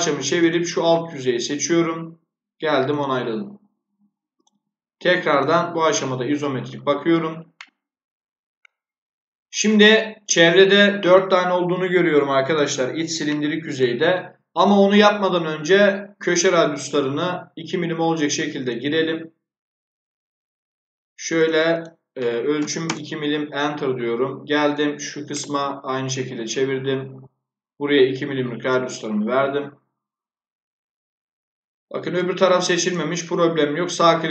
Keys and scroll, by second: 22.5 2, 22.8 Return.